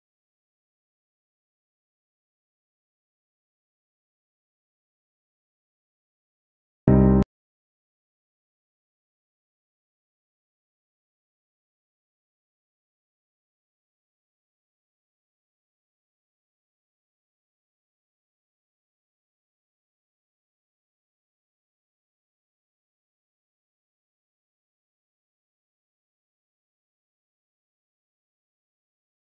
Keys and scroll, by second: 0.1 shift+F2, 0.6 Escape, 1.1 F4, 3.2 shift+F2, 17.6 F3, 18.0 Escape, 22.6 shift+F2, 23.1 Escape.